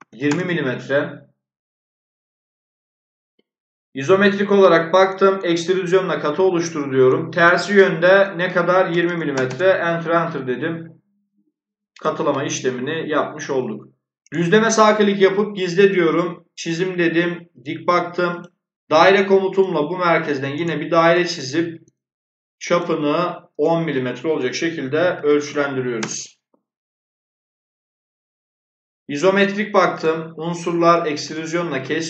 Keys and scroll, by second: 0.0-0.4 typing, 8.5-9.5 typing, 24.8-25.8 typing, 25.9 Return.